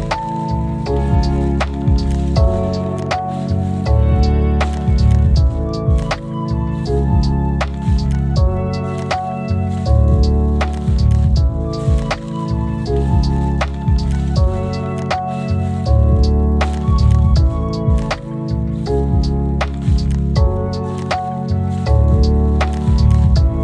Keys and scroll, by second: 2.3-3.0 typing, 11.9 ctrl+alt+z, 12.5 z, 13.3 ctrl+alt+z, 13.6 ctrl+alt+z.